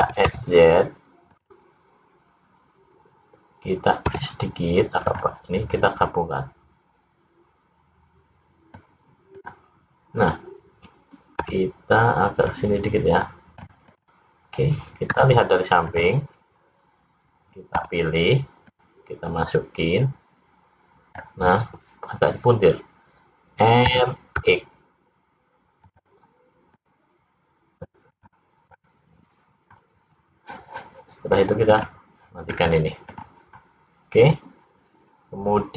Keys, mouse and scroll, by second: 0.1 s, 4.1 s, 5.8 click, 9.3 click, 11.5 l, 12.5 click, 13.9 click, 15.1 `, 17.9 l, 18.8 click, 23.9 r, 26.9 click, 28.1 click, 28.8 middle click, 31.7 click, 32.6 scroll up 3, 33.1 click, 33.6 middle click.